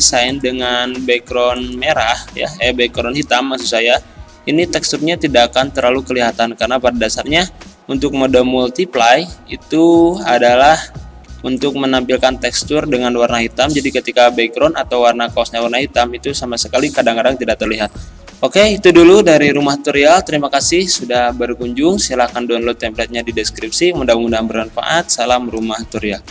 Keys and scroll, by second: 8.9 ctrl+z, 11.3 z.